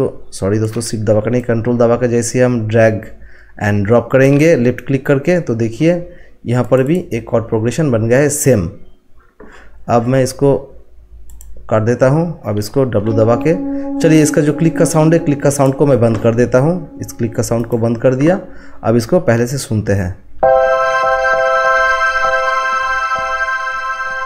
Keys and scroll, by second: 12.9 w.